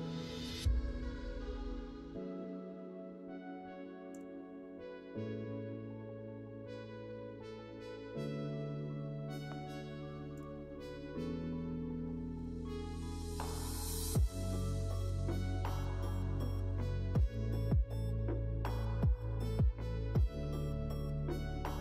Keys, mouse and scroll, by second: 0.5-6.4 drag, 14.6 click, 15.2-16.7 middle drag, 19.0 click.